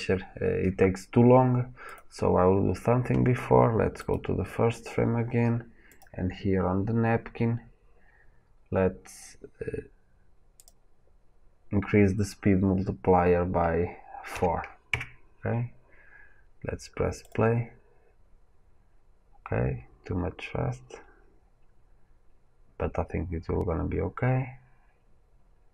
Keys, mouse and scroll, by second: 2.0-4.0 drag, 4.1-5.9 right drag, 5.9 click, 14.9 KP_Enter, 14.9-24.3 drag.